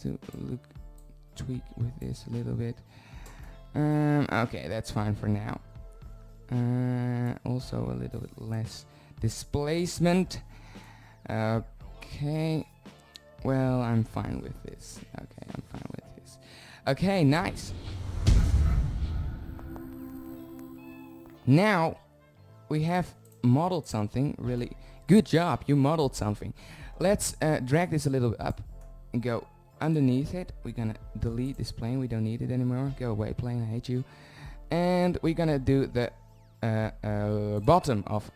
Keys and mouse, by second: 9.0-10.3 drag, 11.7 middle click, 13.2 right click, 14.2 right click, 15.7-16.8 middle drag, 17.6 z, 18.1 z, 23.7 click, 25.3 drag, 25.4-27.1 middle drag, 27.3 click, 27.6 click, 28.7-29.5 drag, 29.7-30.8 middle drag, 32.2 x, 34.7 shift+z, 35.9-37.8 drag.